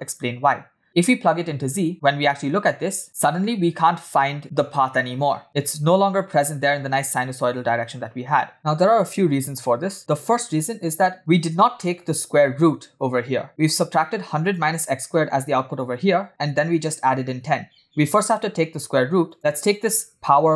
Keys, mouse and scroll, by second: 1.3-2.6 scroll down 4, 1.9-5.4 shift+middle drag, 5.6-6.6 scroll up 1, 8.0-8.4 scroll down 2, 8.4 middle click, 10.5-11.8 scroll up 5, 11.2 shift+middle click, 11.8 shift+middle click, 13.6-14.4 scroll up 2, 14.5 click, 16.6-18.1 drag, 18.4-19.2 scroll up 1, 19.2 scroll up 1, 19.3 click, 19.7-20.5 drag.